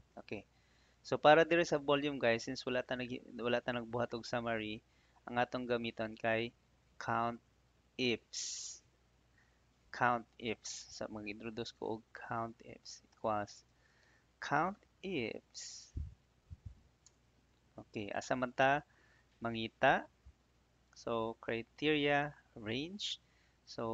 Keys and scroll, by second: 13.0 =, 15.7 Down, 17.0 Tab.